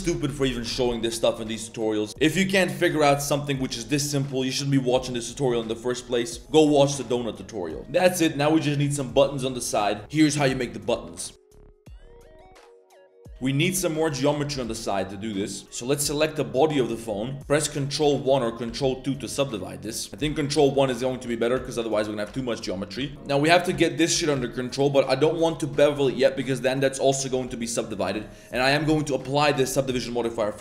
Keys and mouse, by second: 1.7 shift+middle click, 1.8 shift+click, 2.1 click, 2.1 middle click, 3.0 shift+middle drag, 7.8 drag, 7.8 middle drag, 10.7 middle click, 13.5 click, 13.9 ctrl+shift+click, 14.5 shift+s, 15.6 Tab, 15.6 g, 17.2 click, 18.2 ctrl+1, 18.6 ctrl+2, 19.9 middle click, 20.2 ctrl+1, 20.6 shift+middle drag, 20.8-21.1 middle drag, 21.3 shift+middle click, 21.5 Tab, 21.7-22.1 middle drag, 22.4 Tab, 22.4 middle drag, 23.0 Tab, 23.1 middle click, 23.1 ctrl+z, 23.1 2, 23.2 middle click, 23.5 a, 23.6 a, 23.8 alt+middle click, 24.2 alt+shift+middle click, 24.4 middle click, 27.6 middle click, 27.9 click, 28.2 middle click, 28.6 middle drag.